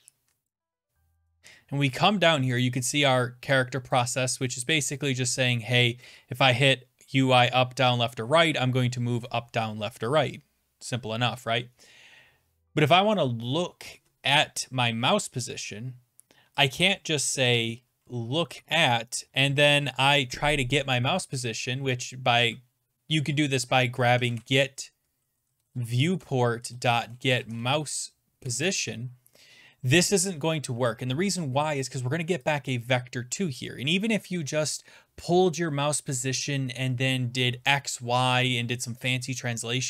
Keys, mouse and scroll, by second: 0.8 click, 1.3 click, 1.5-1.9 scroll down 6, 2.5-3.7 scroll, 3.7 scroll down 6, 3.9 click, 4.5 click, 6.0 click, 6.9 scroll down 6, 16.7 click, 17.5 Tab, 17.8-18.7 typing, 18.0 click, 21.5 typing, 23.9-28.2 typing, 28.4 Tab, 34.0 click, 36.5 click.